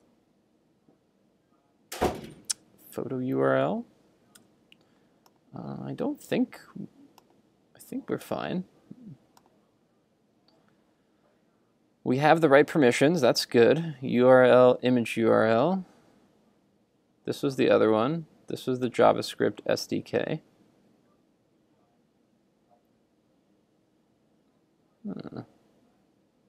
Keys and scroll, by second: 0.0 super+Tab, 4.4 super+Tab.